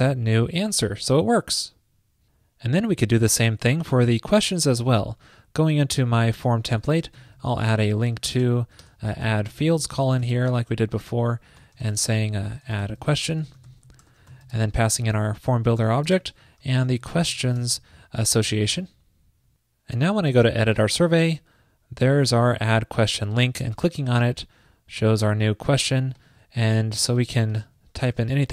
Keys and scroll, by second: 7.2 ctrl+shift+>, 18.7 super+s.